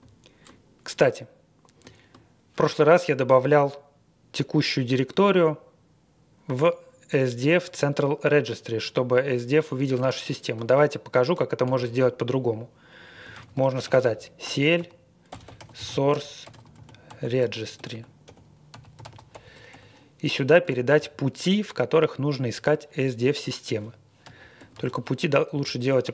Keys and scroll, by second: 11.6 ctrl+d, 12.9 Up, 13.3 ctrl+a, 13.6-21.1 typing, 24.3-26.1 typing.